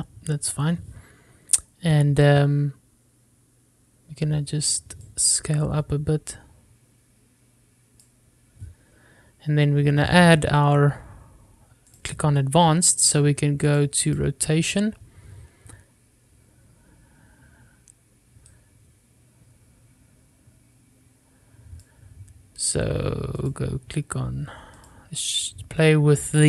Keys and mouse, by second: 0.1-1.2 middle drag, 6.2-9.3 drag, 13.1 click, 14.9 click, 15.3 click, 19.7-23.1 drag, 23.8 click, 26.1-26.4 drag.